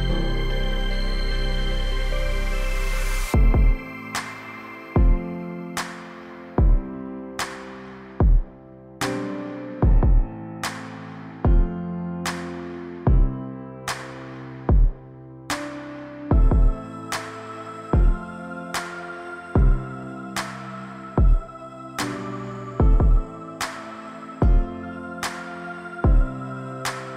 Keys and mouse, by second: 4.9 middle click, 6.1 middle click, 10.2 click, 11.6-12.0 shift+drag, 12.4-13.1 middle drag, 14.6 middle click, 16.1 shift+click, 18.8-19.8 middle drag, 22.1 ctrl+r, 24.8 ctrl+r.